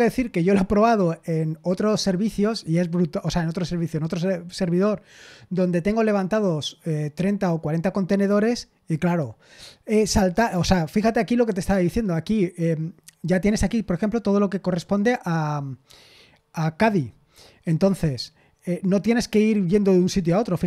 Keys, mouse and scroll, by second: 11.7 click, 13.4-15.0 scroll down 2.